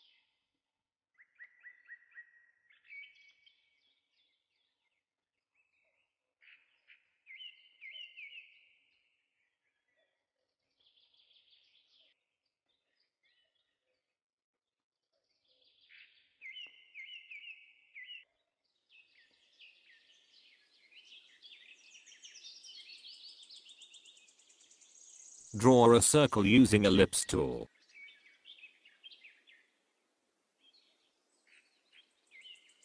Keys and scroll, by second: 6.0 space, 12.7 space.